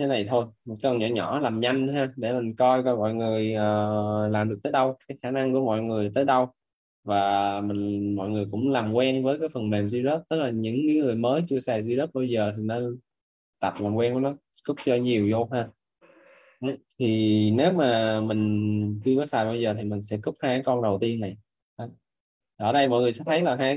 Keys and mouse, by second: 11.3 click, 11.9 click, 16.9 right click.